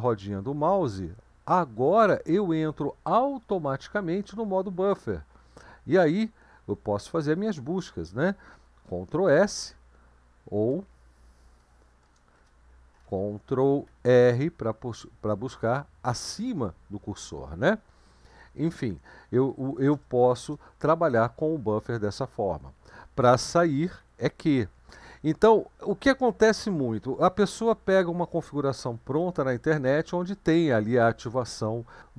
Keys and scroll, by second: 9.6 ctrl+s, 11.6 BackSpace, 12.0 BackSpace, 12.4 Return, 14.1 ctrl+r, 19.7 BackSpace, 19.9 BackSpace, 20.4 Return, 24.0 q.